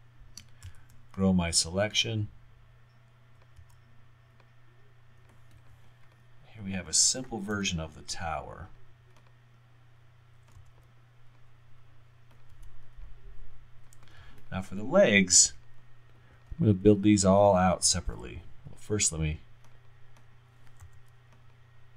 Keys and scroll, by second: 0.7 shift+., 3.6 w, 7.6 alt+y, 10.6 r, 11.2 r, 12.5 w, 17.9 y, 20.9 r, 21.2 r.